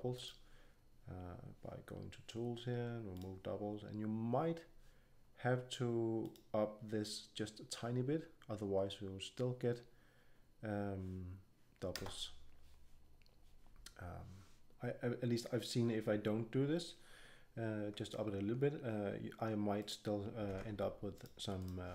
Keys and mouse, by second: 0.1-2.0 drag, 3.1-3.4 drag, 3.9-5.0 drag, 6.2 click, 7.8 click, 11.9 Return, 19.7-21.9 drag, 20.4 ctrl+Tab.